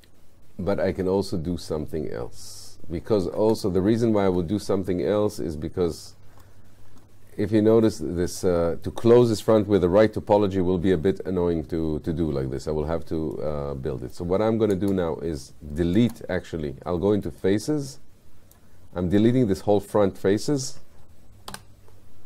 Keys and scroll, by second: 3.5 space, 21.5 Delete.